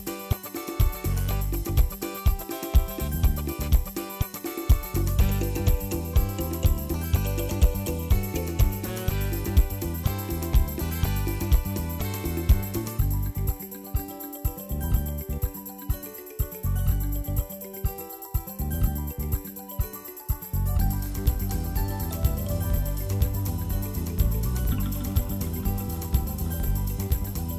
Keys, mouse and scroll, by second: 1.0-1.4 scroll down 1, 1.4-2.7 drag, 12.2 ctrl+s, 13.3 click, 14.2 KP_0, 15.4 click, 15.9 ctrl+s, 18.6-19.8 drag, 20.6 scroll up 1, 21.6 scroll up 1, 21.6-22.1 scroll down 4, 22.1-22.7 drag.